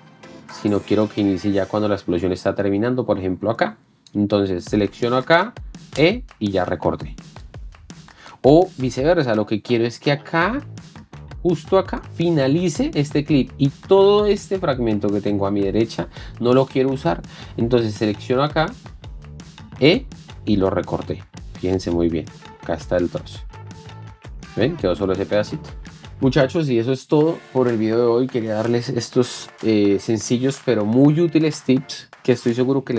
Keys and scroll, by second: 6.4 e, 9.1 ctrl+z, 20.4 e, 24.3 space.